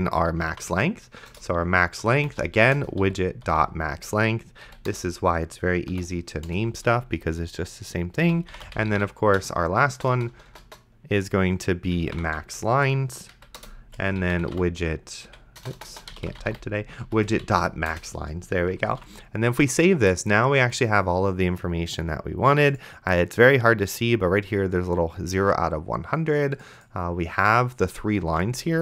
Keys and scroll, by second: 0.2-3.5 typing, 1.3 Return, 4.7 Down, 4.9 Return, 5.9 End, 6.5 Return, 8.0-9.7 typing, 11.7-12.7 typing, 13.3 Down, 13.6 Return, 14.0-18.0 typing, 19.1 ctrl+s, 28.6 d.